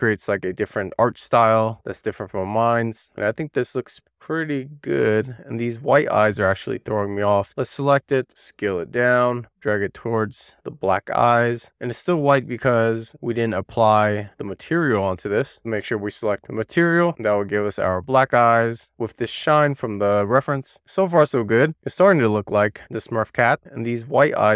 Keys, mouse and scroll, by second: 0.7 middle click, 1.2 scroll down 2, 1.4 shift+middle click, 1.5 scroll up 1, 1.7 click, 3.3 middle click, 3.9 click, 5.0 middle click, 5.3-5.8 scroll up 2, 5.8 click, 6.1 Tab, 6.8 a, 7.7-8.7 scroll down 3, 8.7-9.1 scroll up 1, 9.1-9.6 scroll down 1, 9.6 a, 9.9 click, 10.4-11.2 scroll up 1, 11.2-14.2 typing, 12.4 click, 13.7 click, 13.9 click, 14.4 click, 16.8 click, 17.8 click, 20.5-21.1 scroll up 2, 21.1 click, 23.5-24.0 scroll up 2, 24.1 click, 24.3 Tab.